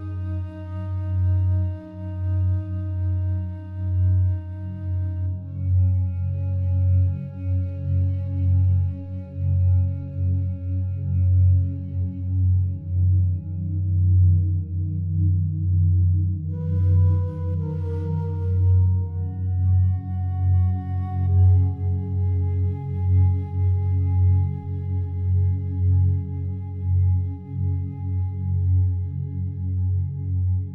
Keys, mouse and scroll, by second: 0.5 click, 1.1-2.4 typing, 2.8 click, 3.8 ctrl+alt+shift+click, 4.7 alt+shift+click, 5.5 ctrl+alt+shift+click, 8.2 ctrl+alt+click, 9.5-11.4 ctrl+alt+drag, 11.4-11.8 typing, 15.2-18.1 drag, 17.8 g, 18.2 z, 19.6 shift+click, 20.6 click, 22.3 r, 22.6 y, 24.2 click, 25.8-27.4 drag, 26.5-27.2 typing, 28.2 click, 29.2 ctrl+alt+click, 30.3 ctrl+alt+shift+click.